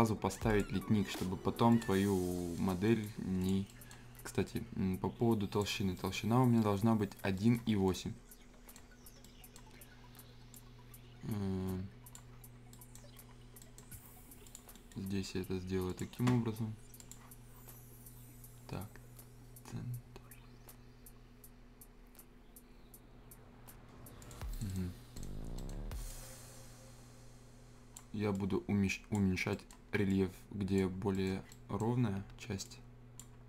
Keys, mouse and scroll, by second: 2.0 scroll down 1, 2.5 scroll up 1, 2.5 right click, 2.8 middle click, 3.4 click, 3.7 right click, 4.4-5.8 drag, 5.8 scroll down 1, 5.9 right click, 6.3 scroll up 1, 6.5 right click, 6.8 scroll up 1, 7.3 right click, 7.6 scroll down 1, 7.8-10.5 right drag, 10.5-12.7 drag, 12.7 right click, 14.4 click, 14.7-15.9 scroll up 1, 15.9 click, 24.2 click, 24.5 right click, 25.5-26.1 scroll up 2, 25.6 right click, 26.1-29.3 drag, 29.3 scroll up 1, 29.5 right click, 30.1 click, 30.9 scroll up 1, 31.1 right click, 31.5 right click, 32.3 Escape, 32.6 click, 33.3 scroll up 1.